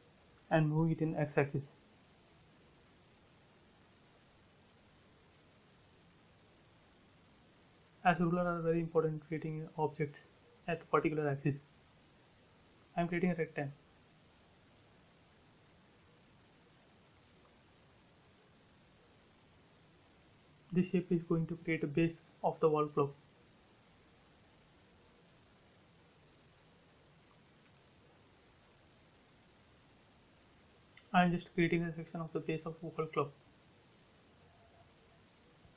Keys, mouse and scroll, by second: 0.4 t, 1.2 click, 2.1 Up, 2.9 click, 3.0 space, 3.9 t, 4.2 click, 5.7 Up, 6.0-7.0 typing, 6.9 Return, 7.9 scroll up 1, 10.6-11.4 typing, 11.9 click, 12.9 space, 13.2 scroll up 1, 14.6 t, 15.0 click, 16.0 Up, 18.4-19.4 typing, 19.4 Return, 20.6 a, 21.3 click, 22.8 space, 23.6 l, 24.8-25.2 scroll up 1, 28.6 click, 30.4 click, 32.6 space, 33.9 click.